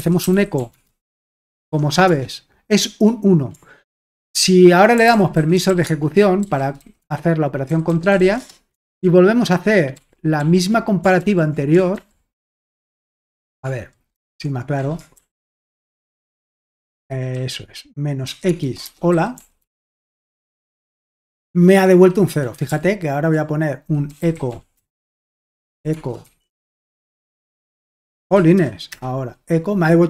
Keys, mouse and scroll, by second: 0.0-2.0 typing, 4.7-8.7 typing, 8.9 ctrl+p, 9.9 ctrl+p, 10.4-16.9 ctrl+p, 23.9-28.5 typing, 28.9 Return.